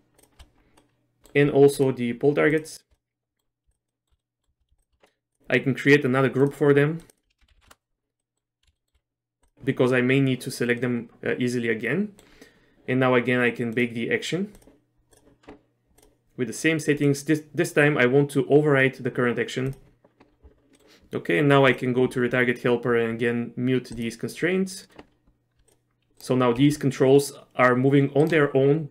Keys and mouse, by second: 0.3 shift+click, 0.8 middle click, 3.0 middle click, 3.7 shift+middle click, 3.9 shift+middle click, 4.2 middle click, 5.4 click, 6.5 click, 7.1-8.1 drag, 8.2 middle click, 8.8 shift+middle click, 10.9-12.3 middle drag, 12.7 space, 13.9-20.1 drag, 20.8 middle click, 21.8 middle click, 24.0 click, 25.7 click, 26.1 g, 26.7 g.